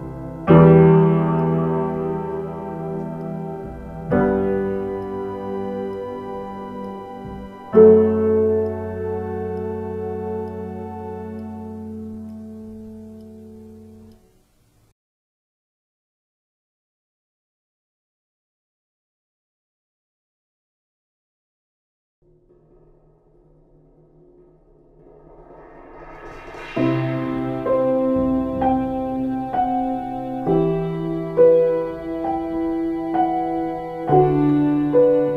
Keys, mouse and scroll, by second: 13.0 space, 18.1 click, 19.4 space, 22.8 ctrl+z, 23.2 click, 30.9 ctrl+z, 32.6 ctrl+z, 34.4 ctrl+z.